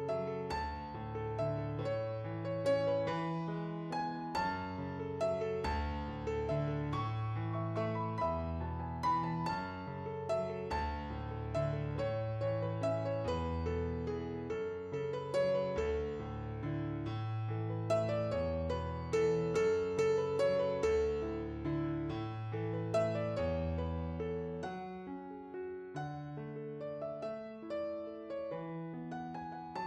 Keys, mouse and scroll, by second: 16.9 middle click.